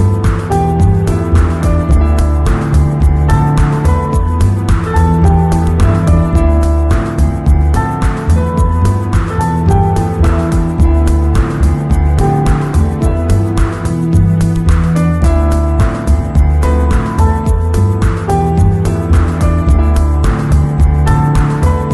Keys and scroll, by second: 14.8 z, 18.1 v.